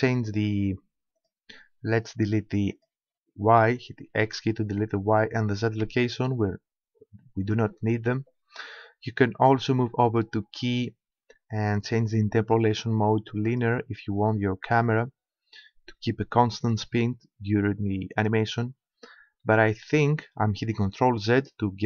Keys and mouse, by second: 1.2-4.4 drag, 4.2 x, 5.2-6.8 drag, 5.8 x, 7.4-9.4 drag, 10.1-11.8 drag, 19.5 ctrl+z.